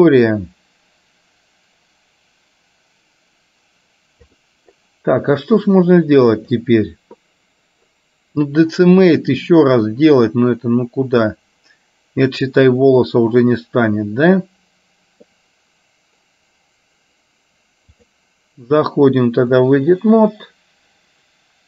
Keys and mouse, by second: 6.6 click, 9.2-12.7 middle drag, 17.9-19.8 drag.